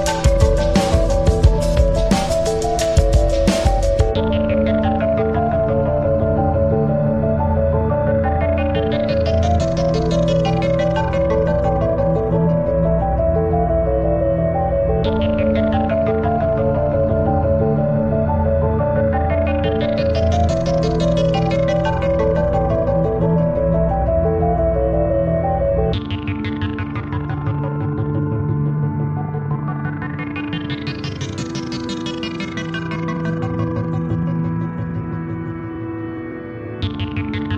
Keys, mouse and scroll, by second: 5.7 click, 6.7 click, 7.7 click, 10.6 click, 13.1 click, 14.3 click, 16.7 click, 17.7 click, 21.2 click, 26.5 click, 27.7 click, 29.7 click, 34.8 click, 36.7 click, 37.3-37.5 drag.